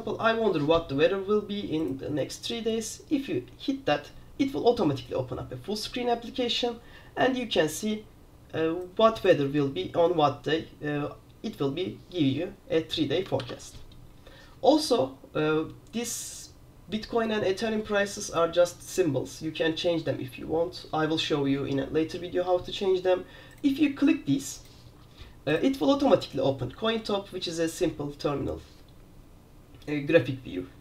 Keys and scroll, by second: 2.2 super+f, 13.5 super+q.